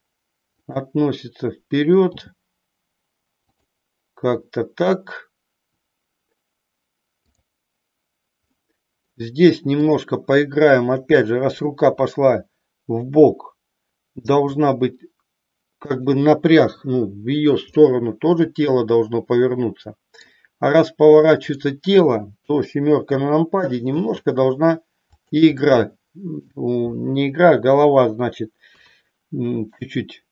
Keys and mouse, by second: 0.7 click, 2.1 g, 3.6 click, 8.6 middle click, 9.8 click, 11.1 KP_7, 14.3 r, 17.7-20.2 middle drag, 22.3 KP_7, 24.0 r, 25.2 click, 25.7 middle click, 28.7 KP_3.